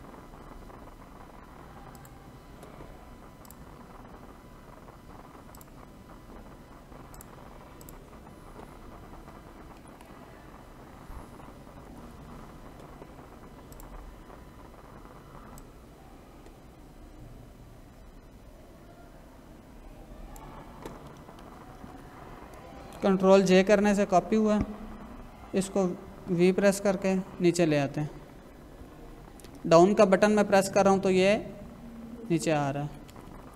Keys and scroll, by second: 9.7 ctrl+=, 11.8 ctrl+-, 21.9 ctrl+j, 23.8 ctrl+-, 26.2 v, 26.9 Down.